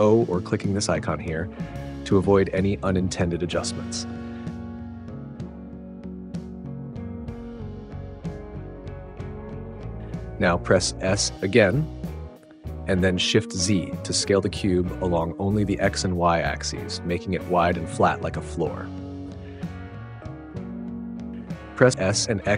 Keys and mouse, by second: 3.6 click, 5.1 click, 5.4 s, 6.6 g, 6.8 z, 8.0 click, 8.3 click, 8.8 g, 9.0 z, 9.8 click, 10.2 s, 11.8 shift+z, 18.1 middle click, 21.7 s, 22.3 x.